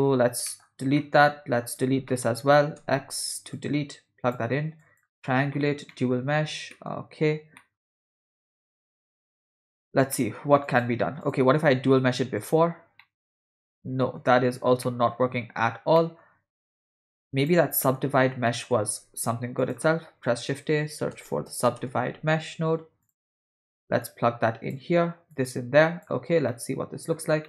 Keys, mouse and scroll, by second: 0.0 x, 0.5 middle click, 1.0 middle click, 1.7 click, 2.1 middle click, 2.8 x, 3.6-4.4 drag, 4.8 click, 5.3 middle click, 5.9 middle click, 6.7 middle click, 7.6 middle click, 8.9 middle click, 10.1 middle click, 10.7 click, 11.2 click, 11.9 shift+d, 13.0-14.2 middle drag, 14.9 middle click, 16.0 middle click, 16.9 middle drag, 17.4 click, 17.5 x, 17.8 middle click, 18.5 middle click, 18.9 shift+a, 24.0-24.8 drag, 25.3-26.1 drag, 26.5 middle click.